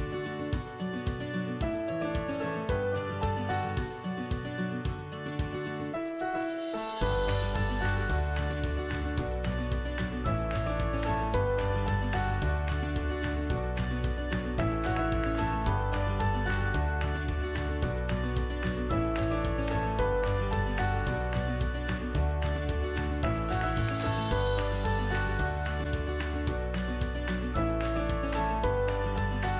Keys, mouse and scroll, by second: 0.0-1.1 drag, 2.6-3.7 drag, 13.7-14.9 drag, 18.9-20.0 drag, 22.1-23.1 drag.